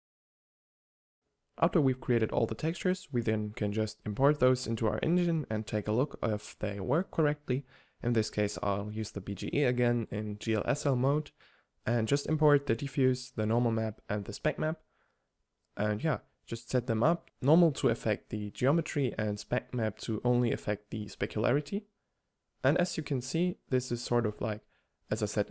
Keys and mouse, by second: 0.1 shift+a, 1.1 shift+a, 2.0 g, 2.7 alt+z, 4.5 shift+a, 5.3 shift+Tab, 5.4 g, 5.9-6.3 drag, 6.5 n, 7.4-8.0 drag, 8.0 n, 13.1-14.6 drag, 15.4-20.0 drag, 22.5-24.2 drag, 24.2-25.5 middle drag.